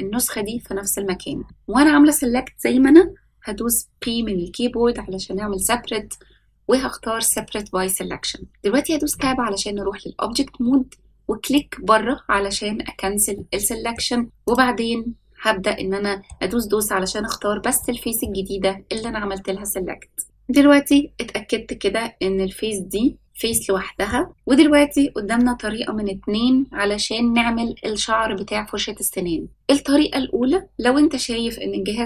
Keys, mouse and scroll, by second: 9.0 Tab, 11.4 click, 13.3 middle click, 14.4 click, 15.7-16.2 middle drag, 17.7-18.2 shift+middle drag, 18.4-19.5 scroll up 2, 23.4-24.1 middle drag.